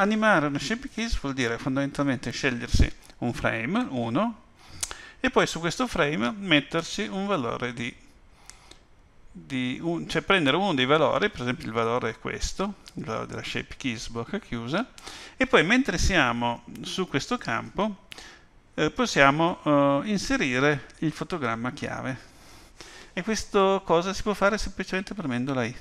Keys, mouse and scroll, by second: 7.8 click.